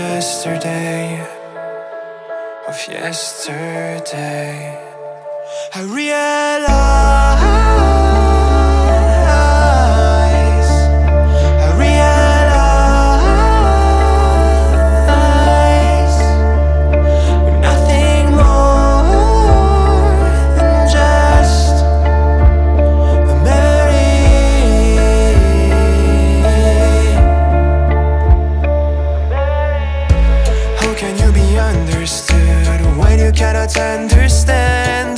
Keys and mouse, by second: 1.4 click, 2.9 middle click, 3.8 3, 4.0 click, 4.4 middle click, 11.4 click, 20.2 KP_1, 21.4 shift+middle click, 22.1 ctrl+middle click, 23.3 shift+middle click, 24.3 ctrl+middle click, 31.1-32.2 drag.